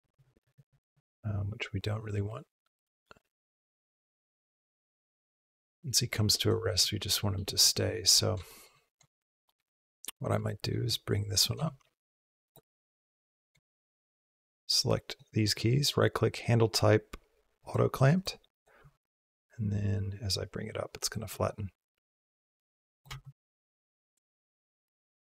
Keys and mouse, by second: 0.8-6.3 drag, 7.1 shift+middle click, 8.3 shift+middle click, 9.2 shift+middle click, 9.7 click, 10.3 shift+middle click, 11.4 g, 13.5 shift+middle click, 14.2-14.9 drag, 15.4-17.5 drag, 17.9 click, 18.2 click, 18.6 g, 21.4-22.9 drag, 22.9 space.